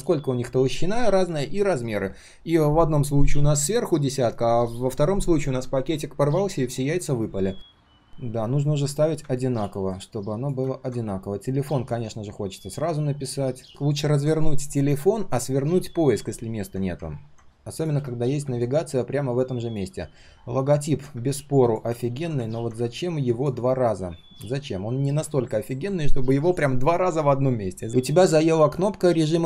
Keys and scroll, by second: 13.6 ctrl+z.